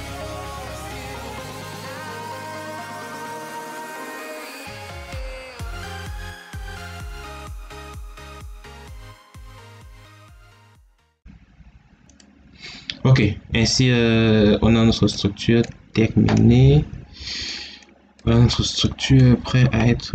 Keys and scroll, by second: 10.1 Escape.